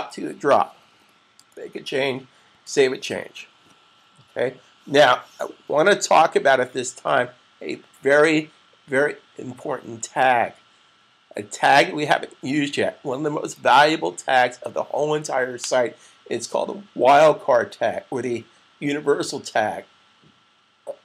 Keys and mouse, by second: 2.4 super+s.